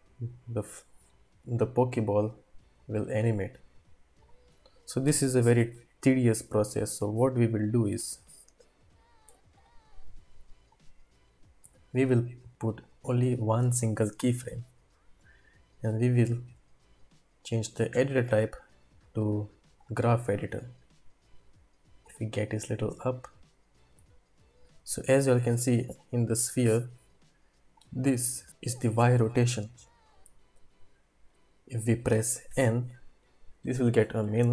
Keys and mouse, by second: 3.0-4.5 drag, 7.3-8.1 drag, 9.3 x, 10.7-11.6 drag, 12.8 click, 16.1-19.8 drag, 22.1-24.5 drag, 26.6 click, 27.8 click, 32.5 n.